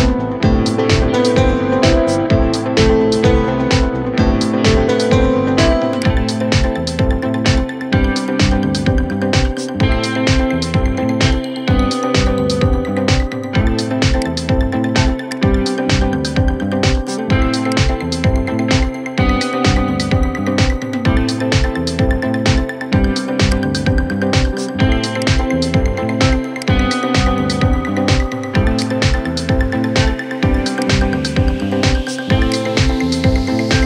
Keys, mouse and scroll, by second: 0.5 ctrl+z, 1.9 ctrl+z, 3.5 KP_7, 5.2 g, 6.7-7.7 middle drag, 7.7 KP_1, 9.4-10.4 scroll down 2, 11.1 /, 11.6 /, 12.3-13.9 middle drag, 13.9 click, 15.0 click, 16.1-17.5 middle drag, 17.5 shift+click, 18.9 KP_7, 20.3 shift+d, 29.4 shift+d, 31.4 r.